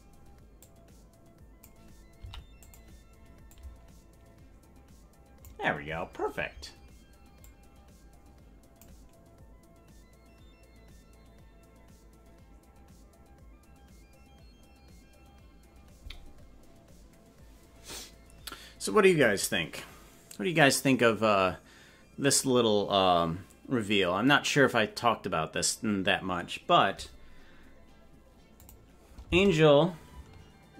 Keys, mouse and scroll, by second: 0.6-1.7 drag, 3.6-5.6 drag, 7.4-8.9 drag, 28.6 click.